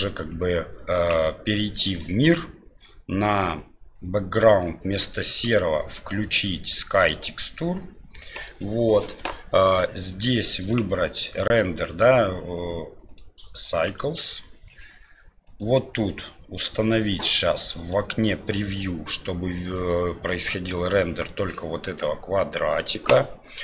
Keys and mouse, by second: 5.2-7.0 drag, 13.0-13.9 drag, 15.5 click, 16.8 click.